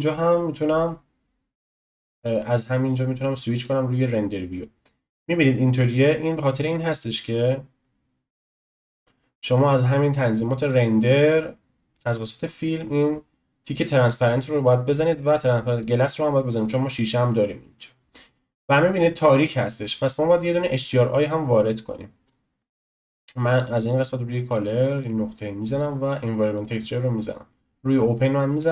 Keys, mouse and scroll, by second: 0.6-2.3 drag, 3.9 click, 5.5-6.3 scroll down 1, 8.6-10.5 scroll down 2, 10.5-11.9 scroll down 4, 11.9 click, 12.4-14.0 scroll down 3, 14.0 click, 14.5-15.2 scroll down 1, 15.4 click, 20.8 click, 22.2 click, 22.2-23.6 scroll up 6, 23.6 click, 24.5-28.7 drag.